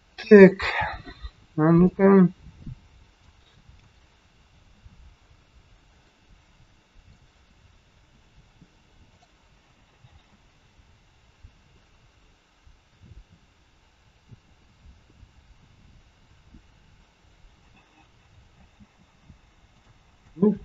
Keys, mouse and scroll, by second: 1.8 click, 3.6-4.3 scroll down 1, 4.7 KP_3, 5.2 scroll down 2, 5.9 shift+middle click, 9.1 click, 10.1 space, 18.4 space, 19.7 click, 20.1 click.